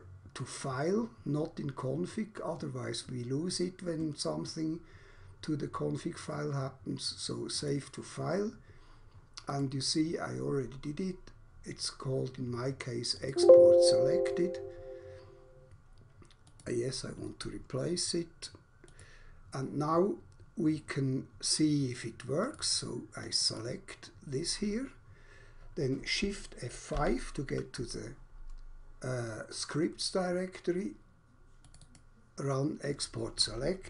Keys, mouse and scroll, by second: 7.3 click, 9.4 click, 13.0 click, 16.4 click, 18.9 click, 22.3 click, 22.8 double click, 23.3 double click, 23.4 double click, 23.6 double click, 26.9 shift+F5, 31.6 click, 31.9 double click.